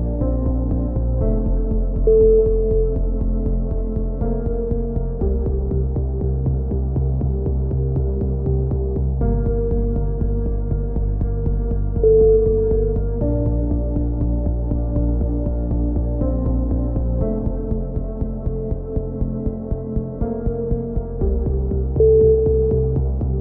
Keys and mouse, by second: 1.3 click, 4.6 click, 5.1-6.2 right drag, 5.5 a, 6.2 shift+s, 6.5 click, 8.0 click, 9.1 shift+s, 9.7 KP_1, 10.1-11.1 middle drag, 13.8 t, 14.4 click, 17.5 click, 17.7 r, 19.0 click, 19.2 s, 20.7 n, 21.6 click, 22.6 click.